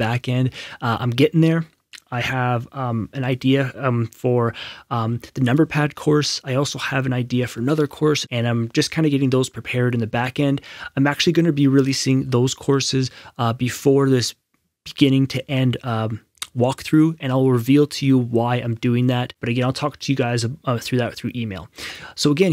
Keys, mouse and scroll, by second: 21.8 click.